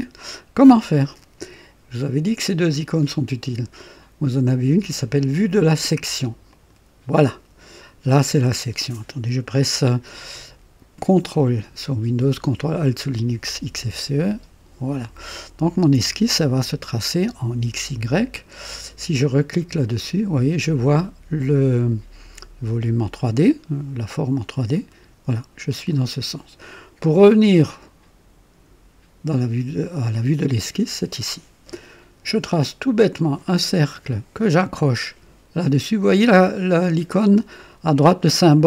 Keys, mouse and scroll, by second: 6.5 click, 8.2 click, 13.2-14.0 ctrl+alt+drag, 14.2-16.0 drag, 19.8 click, 24.7 click, 30.4 click, 33.2 click.